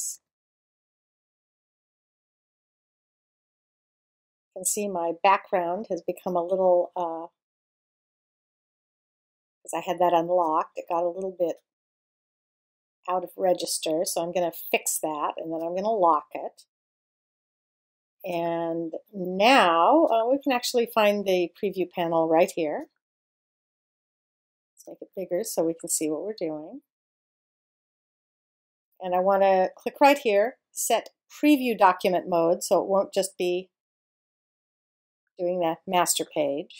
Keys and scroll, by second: 0.1 shift+super+0, 2.1 alt+super+0.